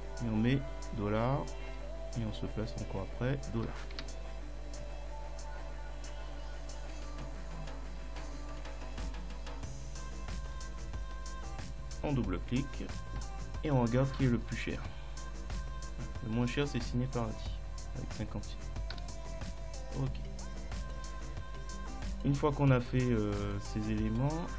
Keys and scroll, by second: 0.7 ;, 2.6 ;, 4.0 Return, 14.5 ctrl+Down, 16.2 Left, 16.5 Right, 19.0 ctrl+Up.